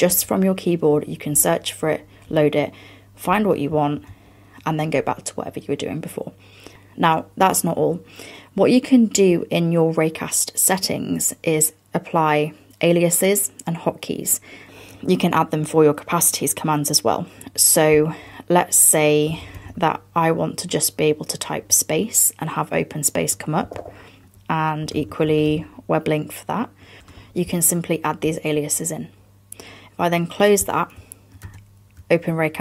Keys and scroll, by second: 27.0 BackSpace, 31.5 super+space.